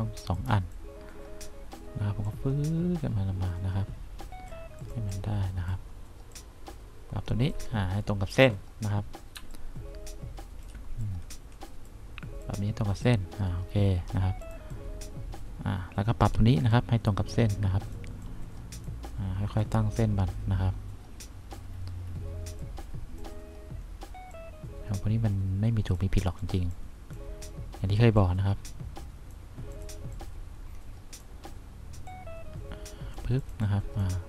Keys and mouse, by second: 2.9-4.7 drag, 5.4 click, 9.5 1, 14.6 click, 15.0-16.4 drag, 16.8-18.1 drag, 18.5 click, 20.3-21.7 drag, 22.7 click, 24.5-26.2 drag, 26.6 click, 26.9 click, 29.9 click, 30.3-31.3 drag, 32.4 click, 33.9 click.